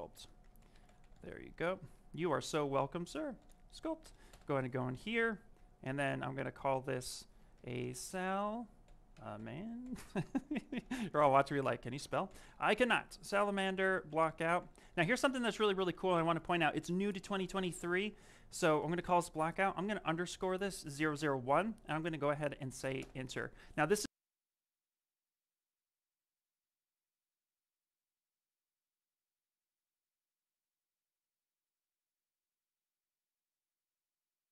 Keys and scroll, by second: 0.0 shift+-, 0.3 shift+s, 0.9 p, 1.8 BackSpace, 3.9 Return, 4.2 Return, 7.1-7.9 typing, 9.0 a, 12.0 a, 13.4 shift+-, 14.0 b, 19.0 t, 22.9 Return.